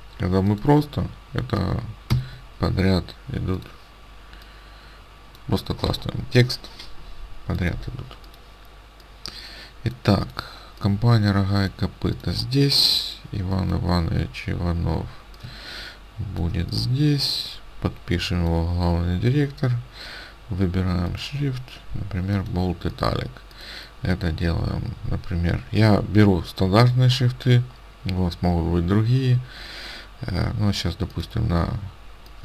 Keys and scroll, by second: 2.1 ctrl+v.